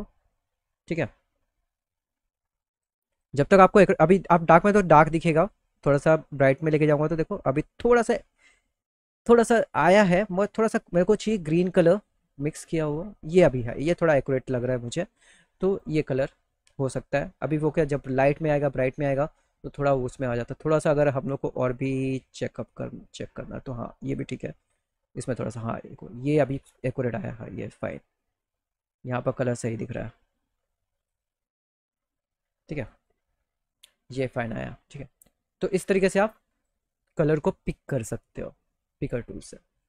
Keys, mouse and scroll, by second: 2.4 click, 2.7 click, 3.9 click, 5.4 click, 6.3 click, 8.8 click, 11.5 click, 12.3-12.7 scroll down 2, 15.3 click, 19.4 click, 20.8 click, 22.1 middle click, 22.8 scroll up 2, 24.2 click, 24.7-26.4 scroll up 2, 27.4 click, 29.4 click, 30.6 click, 32.4 click, 32.6 click, 34.0 click.